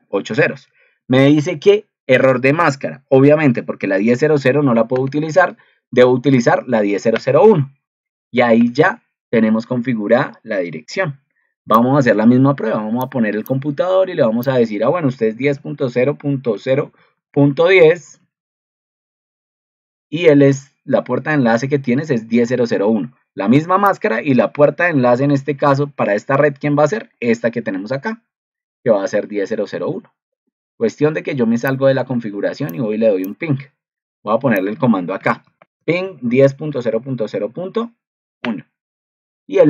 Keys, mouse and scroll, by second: 18.4 ctrl+c, 19.7 ctrl+v, 25.3 ctrl+2.